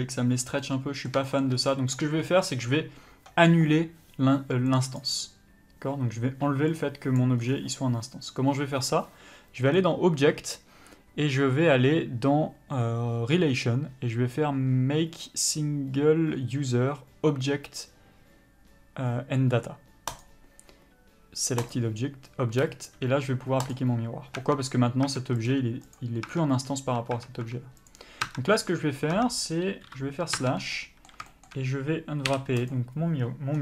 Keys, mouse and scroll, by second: 0.9 middle click, 1.6 shift+middle click, 1.9 scroll up 1, 2.1 middle click, 7.1 click, 7.8 scroll down 1, 9.4-14.4 scroll up 1, 24.1 click, 24.7 Tab, 25.8 click, 26.6 Tab, 28.2 click, 28.6 Tab, 29.0-29.5 scroll up 1, 29.5 scroll down 1, 29.6 Tab, 30.2 KP_Divide, 30.7 Tab, 31.1 middle click, 31.6 shift+middle click, 32.0-32.6 scroll up 1, 33.1 u.